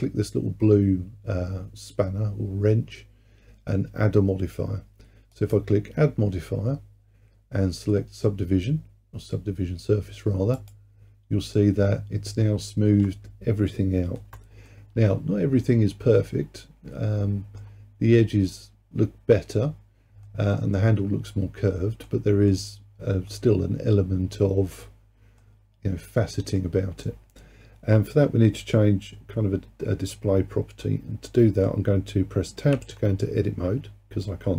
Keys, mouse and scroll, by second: 5.4-8.5 drag, 12.5-14.7 scroll up 2, 14.7-17.8 middle drag, 20.3-28.6 middle drag, 30.9-32.8 middle drag, 32.8 Tab.